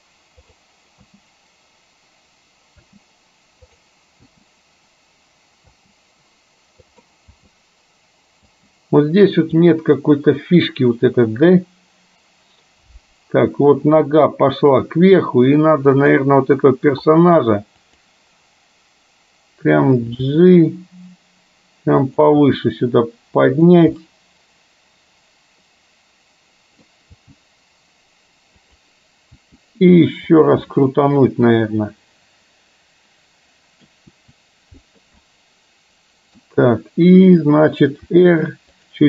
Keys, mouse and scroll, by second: 0.7 space, 1.5 space, 3.8 click, 3.8 space, 5.0 space, 6.6 space, 6.9 click, 9.7-14.9 drag, 9.7 space, 17.9 click, 20.3 g, 22.5 g, 24.0-27.0 middle drag, 27.3 g, 29.4 r, 30.8-34.0 middle drag, 34.2 r, 35.3-36.5 middle drag, 38.0 r.